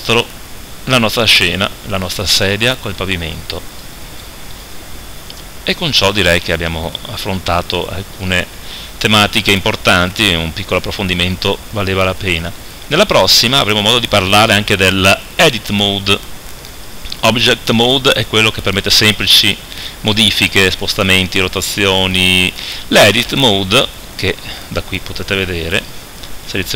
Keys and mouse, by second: 0.2 KP_7, 25.6 Tab, 25.8-26.7 drag, 26.4 Tab.